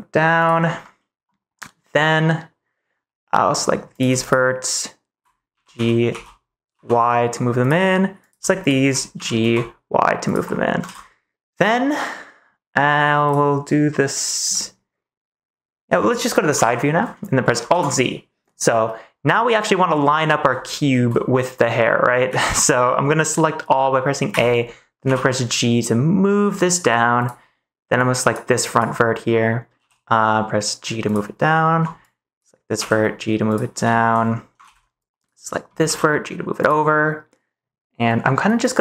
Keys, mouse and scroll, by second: 0.3 click, 0.8 scroll up 1, 0.8 middle click, 3.5 scroll up 1, 4.2 shift+click, 5.4 g, 5.7 x, 6.1 z, 6.7 y, 7.5 click, 8.6 shift+click, 9.1 g, 9.3 y, 10.2 click, 10.4 middle click, 10.8 ctrl+s, 11.7 middle click, 12.7 middle click, 14.5-15.9 middle drag, 16.5 KP_3, 17.6 alt+z, 20.6 shift+middle click, 22.2 a, 22.6 ctrl+s, 24.2 a, 25.0 g, 27.1 click, 28.0 click, 28.6 click, 29.7 g, 31.0 click, 32.0 click, 32.7 g, 33.8 shift+middle click, 34.6 ctrl+s, 35.0 click, 35.8 g, 36.5 click, 36.6 middle click.